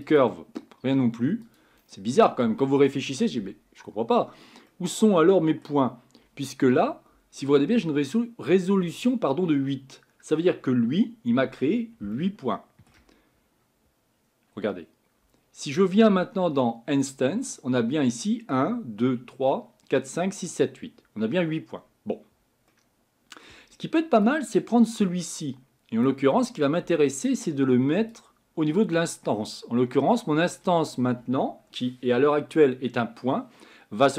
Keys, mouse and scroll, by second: 14.2-19.0 scroll down 3, 30.5 click.